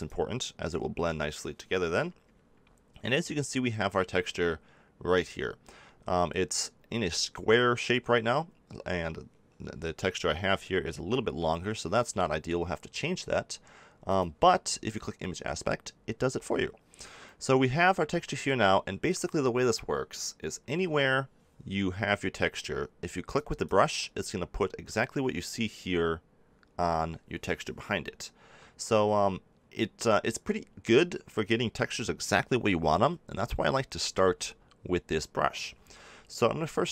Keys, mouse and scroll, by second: 0.0-1.9 drag, 14.0-16.9 drag, 18.8-20.8 middle drag, 20.8 KP_7, 21.5-24.0 middle drag, 30.4 middle click, 34.2 ctrl+z, 36.8 n.